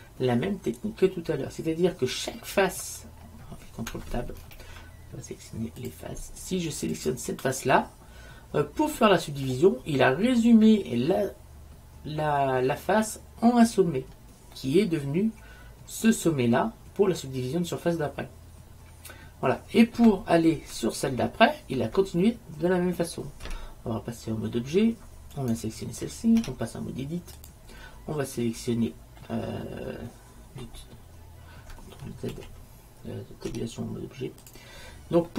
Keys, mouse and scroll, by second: 4.5 ctrl+Tab, 7.1-8.1 right drag, 8.1-9.4 middle drag, 14.7 middle click, 15.9 middle click, 18.9-20.1 middle drag, 21.7 middle click, 23.6 Tab, 25.5 right click, 26.5 Tab, 29.1 middle click, 32.4 ctrl+z, 33.6 Tab.